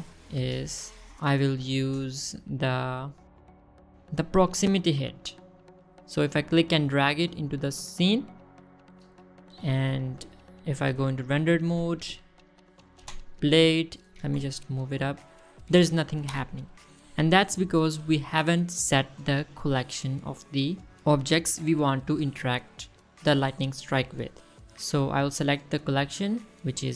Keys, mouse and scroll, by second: 1.4 click, 5.4 click, 9.8 click, 11.2 middle drag, 11.7 click, 12.3 click, 12.7 space, 13.4 scroll up 1, 13.5 middle drag, 14.0 space, 14.3 scroll down 1, 14.4-14.7 middle drag, 15.4 g, 15.6 z, 16.3 click, 16.8 space, 17.4 space, 25.7-26.9 drag.